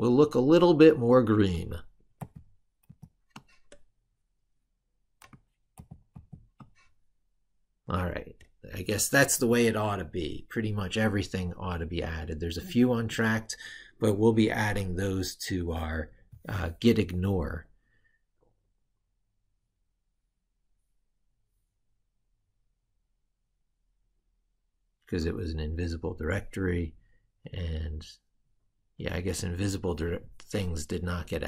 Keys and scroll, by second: 2.0 ctrl+-, 2.7 ctrl+-, 4.1 ctrl+-, 5.7 ctrl+-.